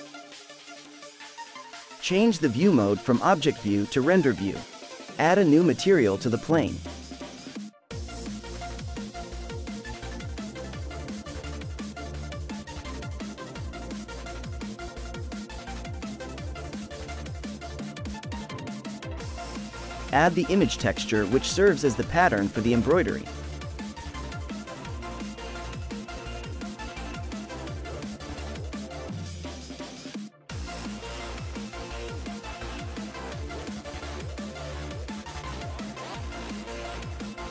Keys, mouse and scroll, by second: 3.1 drag, 5.6 click, 6.2-7.4 drag, 7.4-8.3 scroll down 2, 8.3-11.5 drag, 13.5 e, 18.4-19.2 scroll up 2, 19.2 scroll up 5, 19.4 middle click, 20.0 click, 20.5 ctrl+t, 22.0 scroll up 2, 23.0-24.1 middle drag, 24.1-25.4 scroll up 3, 25.8 click, 28.0-28.7 scroll up 5, 30.0-31.1 scroll down 1, 31.1 middle click, 31.3-34.0 scroll up 2, 34.0-34.6 scroll up 4, 35.4-37.5 drag.